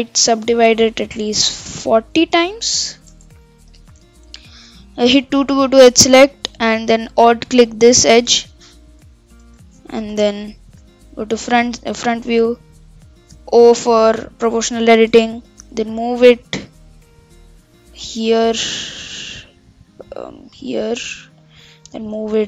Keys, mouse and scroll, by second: 0.8-4.8 drag, 5.2 2, 7.5 alt+click, 9.2 Tab, 9.4 Tab, 10.1 KP_3, 10.2 KP_Enter, 11.2 KP_1, 12.5 middle click, 13.0-14.0 scroll down 1, 14.0 o, 14.4 KP_1, 15.3 shift+middle click, 15.8 g, 21.8 g.